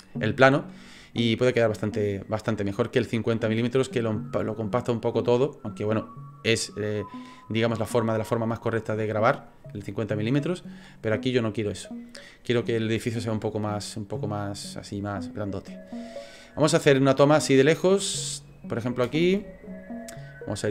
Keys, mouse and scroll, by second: 13.8 middle click, 16.3-16.7 scroll up 1, 16.7 middle click, 17.3-19.0 scroll down 3, 17.8-19.0 scroll up 1, 19.0 space.